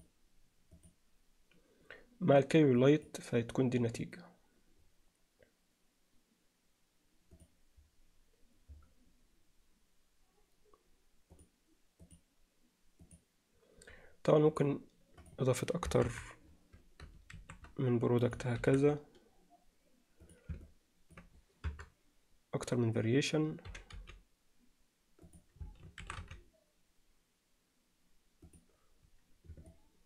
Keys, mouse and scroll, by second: 2.8 click, 7.4 click, 15.2 click, 15.9 KP_0, 16.1 KP_7, 17.8 shift+d, 19.0 shift+d, 20.6-21.2 alt+middle drag, 21.7 KP_0, 23.7 g, 26.4 shift+d, 29.7 alt+shift+middle click.